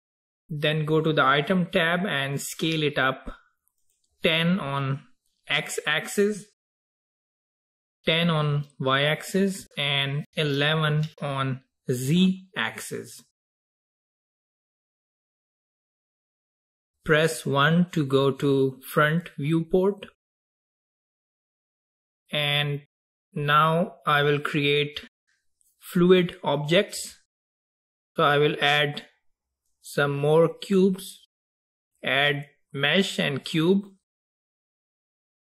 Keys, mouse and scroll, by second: 0.0 click, 3.9-6.9 drag, 10.6 KP_1, 13.1-15.0 scroll down 3, 15.0-18.1 middle drag, 20.3 KP_1, 21.2-21.9 scroll up 4, 22.2-24.8 scroll up 1, 28.6-31.7 drag.